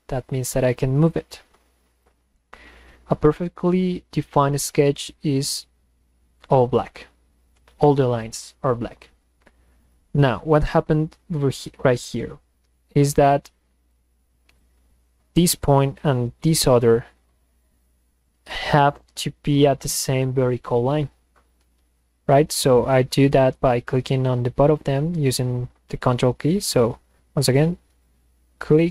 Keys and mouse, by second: 9.9 click, 11.1-13.2 drag, 13.8 click, 14.5 click, 15.4 click, 16.5 ctrl+click, 26.7 click, 28.0 ctrl+click.